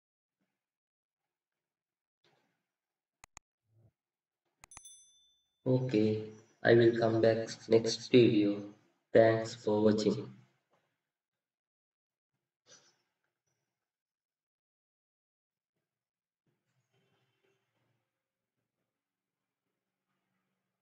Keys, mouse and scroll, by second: 1.2 scroll up 1, 1.4 middle click, 4.2-4.8 scroll up 1, 4.8 scroll down 1, 4.8 scroll up 1, 11.6-12.2 scroll up 1, 12.2 scroll down 1, 13.2-13.8 scroll up 1.